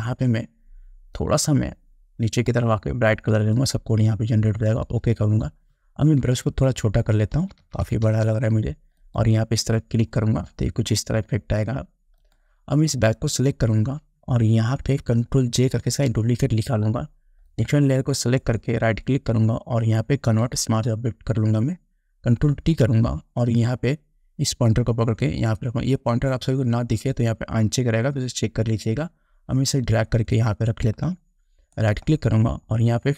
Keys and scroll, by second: 6.4 [, 16.0 ctrl+j, 22.7 ctrl+t.